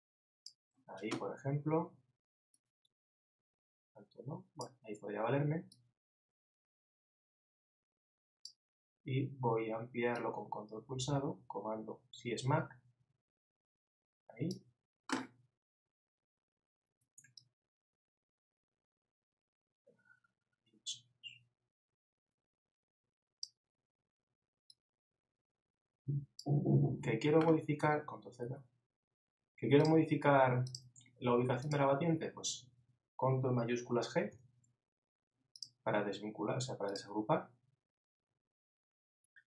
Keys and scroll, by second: 28.4 super+z.